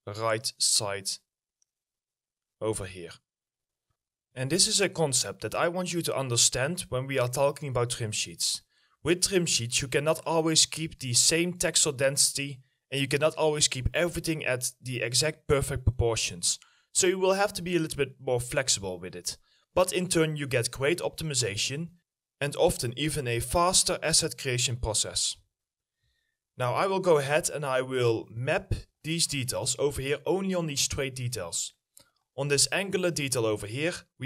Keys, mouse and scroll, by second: 6.5-7.0 scroll down 1, 7.0 middle click, 7.5 alt+middle click, 8.3-8.6 scroll up 1, 9.2 alt+middle click, 12.4 middle click, 13.1 scroll up 1, 13.4 alt+middle click, 19.6 middle click, 20.4 scroll down 1, 21.9 middle click, 25.3 middle click, 26.2 alt+middle click, 28.5 double click, 29.6 middle click, 30.7 double click, 32.4 middle click, 32.7-34.2 scroll up 1.